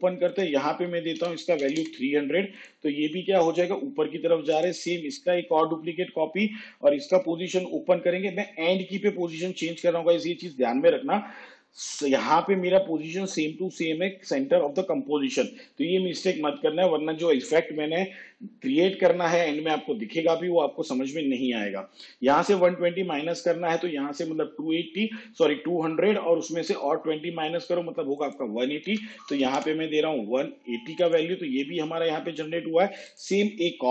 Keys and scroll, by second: 1.4 3, 5.7 ctrl+d, 7.4 p, 29.1 1.